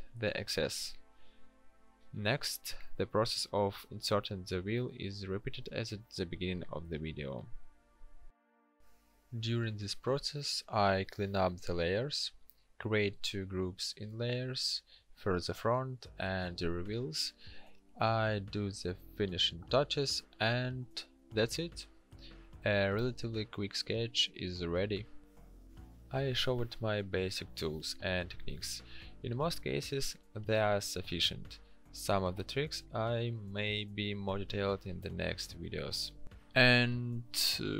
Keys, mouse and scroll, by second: 0.2 Delete, 4.9 ctrl+t, 9.8 w, 11.9 Delete, 14.5 ctrl+d, 36.4 ctrl+u.